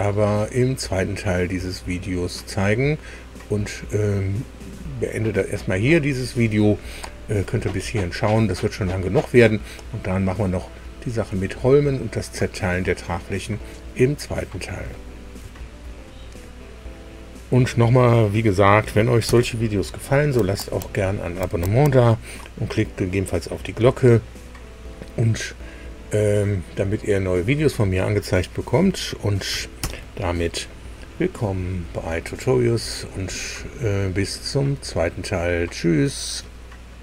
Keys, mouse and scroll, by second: 16.0 super+r, 19.2 super+u, 29.7 super+i.